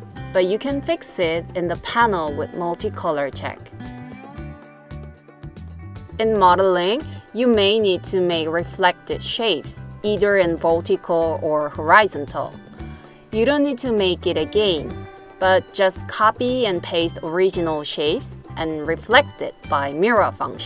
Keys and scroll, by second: 15.6 super+c.